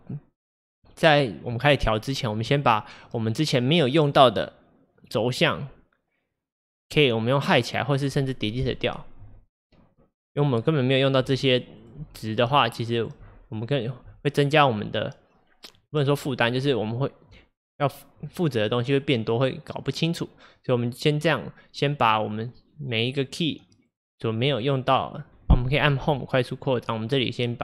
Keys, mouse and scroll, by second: 9.3 Delete, 10.2 click, 11.3 Delete, 11.8 click, 12.1 Delete, 12.3 click, 12.6 Delete, 13.0 click, 13.3 Delete, 13.8 click, 14.1 Delete, 22.0 click, 23.9-27.6 drag, 24.5-25.4 scroll down 11, 25.4 scroll up 2, 26.1 Home.